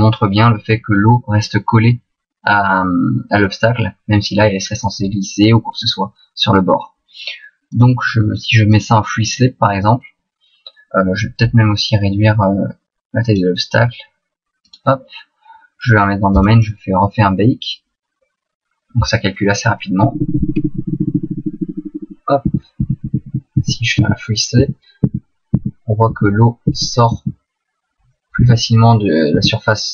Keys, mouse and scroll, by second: 0.2 middle click, 1.4 middle click, 7.7 click, 11.8 click, 14.6 right click, 16.3 click, 20.0 Left, 20.2 Left, 20.3 Left, 20.5 Left, 20.7 Left, 20.9 Left, 21.1 Left, 21.2 Left, 21.4 Left, 21.5 Left, 21.6 Left, 21.8 Left, 22.0 Left, 22.4 Right, 22.8 Right, 23.0 Right, 23.2 Right, 23.6 Right, 24.0 Right, 24.6 Right, 25.0 Right, 25.5 Right, 26.0 Right, 26.7 Left, 27.2 Right, 28.4 Right, 29.3 Right.